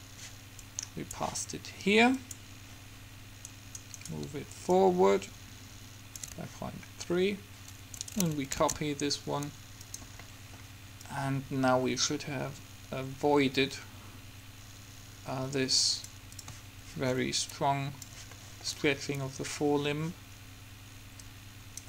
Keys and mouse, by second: 0.8-3.8 drag, 3.7 right click, 8.2-9.7 right drag, 8.9 shift+d, 10.3-12.8 drag, 16.5-18.5 drag, 18.5 middle click, 21.5-21.8 drag.